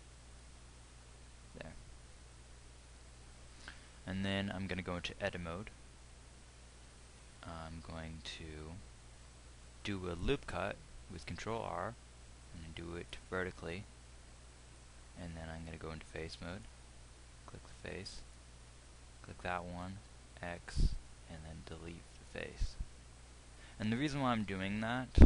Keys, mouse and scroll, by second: 5.9 Tab.